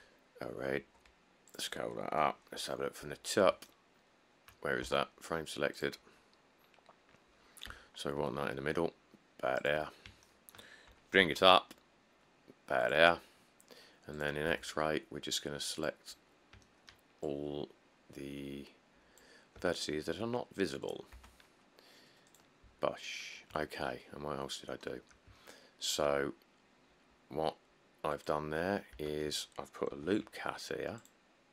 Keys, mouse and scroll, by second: 1.0 s, 3.3 7, 5.0 q, 6.8-7.2 scroll, 7.9 g, 11.1 g, 11.4 z, 14.7 Tab, 16.4 click, 16.5 click, 19.8 x, 21.3 Tab, 23.0 middle click, 23.1 middle click, 29.1 Tab, 30.2 ctrl+r.